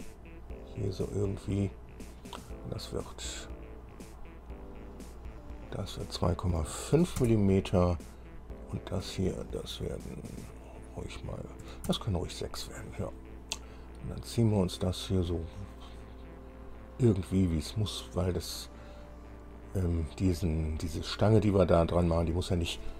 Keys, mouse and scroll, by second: 0.9 click, 1.9 click, 2.3 right click, 4.1 click, 5.6 click, 6.7 KP_2, 6.9 KP_Decimal, 7.2 KP_5, 9.1 click, 10.4 click, 11.9 KP_6, 12.1 KP_Enter, 14.8-18.7 drag.